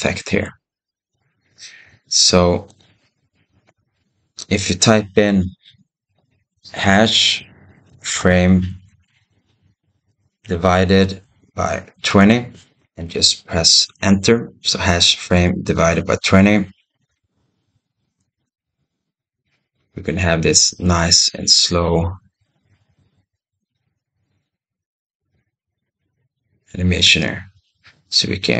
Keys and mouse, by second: 1.8 ctrl+z, 2.5-16.9 drag, 18.1 space, 23.4 click, 26.9 space.